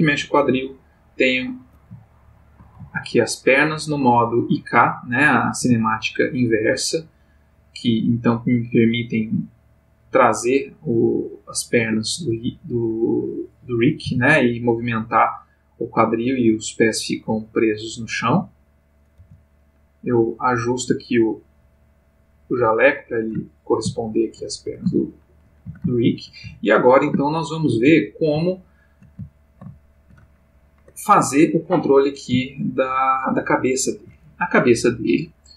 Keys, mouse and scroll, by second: 1.7 shift+click, 2.1-2.7 shift+middle drag, 4.0 click, 4.7 click, 5.6 g, 11.8 Escape, 13.3 click, 14.0 g, 18.1 click, 18.9 click, 19.2 g, 22.6 click, 23.5-24.6 ctrl+middle drag, 25.1-25.5 ctrl+shift+middle drag, 25.9 ctrl+shift+middle click, 26.7-28.1 ctrl+shift+middle drag, 28.5 shift+middle click, 29.5-31.0 ctrl+shift+middle drag, 33.5-34.2 ctrl+middle drag.